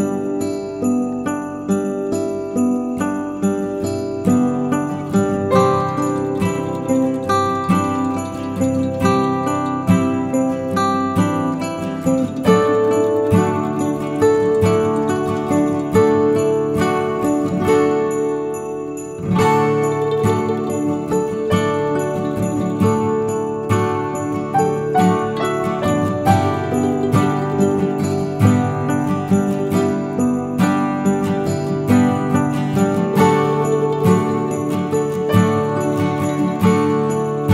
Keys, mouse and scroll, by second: 0.3-0.6 scroll down 2, 3.6 middle click, 3.9 Tab, 4.7 alt+click, 5.3 g, 6.4 ctrl+b, 9.4 middle click, 9.5-10.6 scroll up 4, 9.9 middle click, 10.6 middle click, 11.2-11.8 scroll up 1, 11.8 Delete, 13.0 middle click, 13.3-13.7 scroll down 3, 13.5 middle click, 14.5 middle click, 14.7 scroll up 4, 14.9 middle click, 15.7 scroll down 3, 16.0 middle click, 16.6 ctrl+z, 17.0 middle click, 17.3 scroll up 3, 17.8 g, 21.0 g, 22.7 click, 23.6 alt+click, 24.3 alt+click, 25.1 alt+shift+click, 25.6 alt+shift+click, 26.9 alt+shift+click, 28.1 alt+shift+click, 28.8 alt+shift+click, 28.9 middle click, 29.3 scroll down 2, 29.7 alt+shift+click, 30.1 scroll down 2, 30.6 shift+middle click, 31.1 alt+shift+click, 31.7 alt+shift+click, 32.1 alt+shift+click, 32.4 scroll down 2, 32.6 middle click, 33.4 ctrl+b.